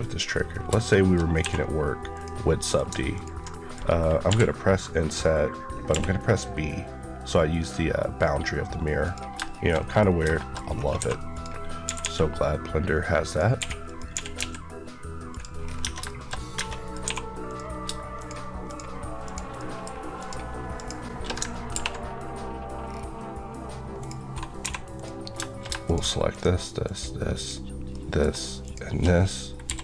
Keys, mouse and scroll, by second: 0.0 click, 0.4 scroll down 2, 0.6 shift+middle click, 2.0 click, 2.5 middle click, 3.0 ctrl+click, 3.4 middle click, 3.7 scroll up 1, 5.7 b, 8.9 click, 9.3 shift+middle click, 9.9-10.5 scroll up 3, 10.3 shift+middle click, 10.9-11.9 typing, 11.2 click, 13.1 click, 13.5-14.2 typing, 13.7 click, 14.0 click, 15.2 click, 15.5 scroll, 15.6 scroll down 1, 15.7 Tab, 15.9 shift+middle click, 16.4 Tab, 16.5 middle click, 16.9 2, 17.3 click, 18.5 shift+Left, 19.4 shift+middle click, 20.6 shift+Left, 21.6 ctrl+b, 22.7 scroll down 1, 23.4-23.9 ctrl+scroll down 2, 24.5 click, 24.5 3, 24.8 click, 26.2 shift+click, 26.2 shift+Left, 27.8 shift+middle click, 28.5 shift+middle click, 29.2 scroll up 1, 29.6 e, 29.7 right click.